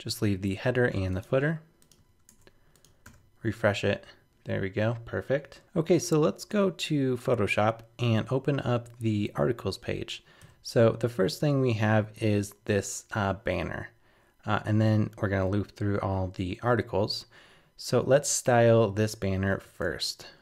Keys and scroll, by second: 2.3 super+Tab, 3.0 super+r, 5.6 super+Tab.